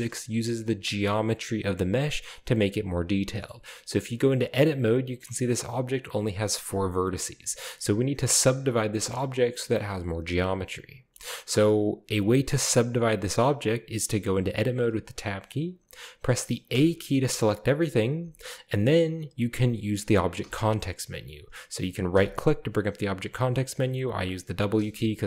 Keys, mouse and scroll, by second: 0.8 Tab, 3.2-3.9 scroll down 2, 3.3-4.5 middle drag, 4.6 right click, 5.4 right click, 6.1 right click, 6.7 right click, 7.0 middle click, 7.7 shift+middle click, 9.0 shift+middle click, 10.6-11.4 scroll down 2, 13.2-16.7 scroll up 2, 16.7 a, 17.2 a, 20.4 w, 22.1 w, 24.7 w.